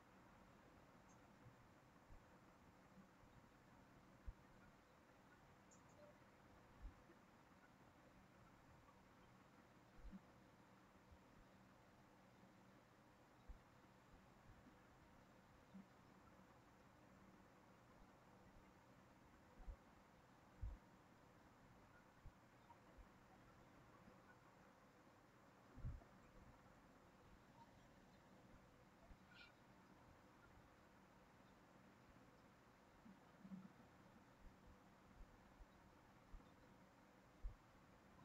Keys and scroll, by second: 16.2 ctrl+v.